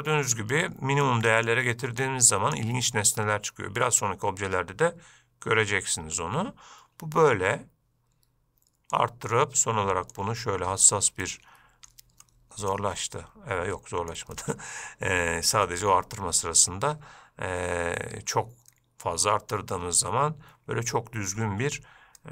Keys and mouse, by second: 1.3 click, 2.3 click, 3.1-4.2 middle drag, 9.2-12.3 drag, 12.5 middle click, 13.3-14.4 middle drag, 14.6-15.9 middle drag, 19.0-19.8 middle drag.